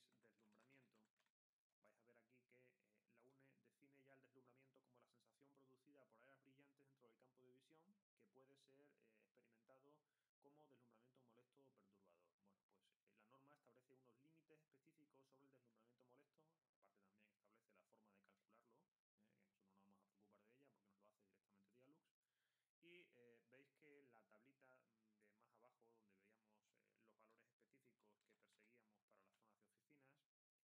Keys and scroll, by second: 0.0-1.7 typing, 27.3-29.3 typing.